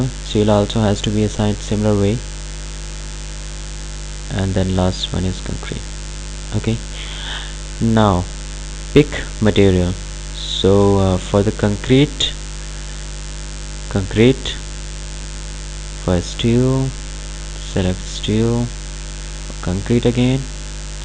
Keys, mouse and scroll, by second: 8.2 click, 11.8 click, 14.6 click.